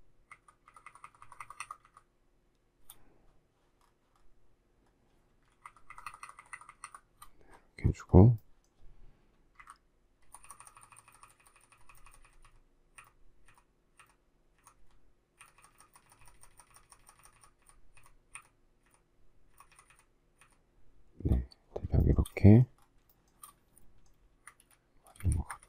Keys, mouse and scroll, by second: 0.3 shift+Right, 5.6 shift+Right, 9.6 shift+Up, 10.3 shift+Down, 22.0 shift+middle click, 23.1 shift+middle click, 24.2 space, 24.5 Escape, 25.1 space, 25.2 Escape, 25.5 Escape.